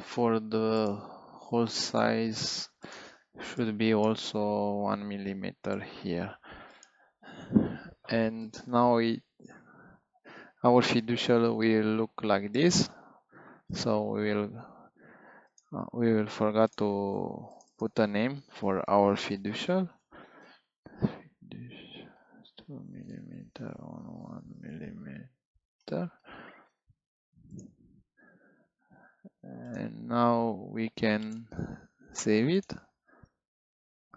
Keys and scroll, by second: 4.5 1, 5.6 Return, 19.7-21.1 typing, 22.1-24.5 typing.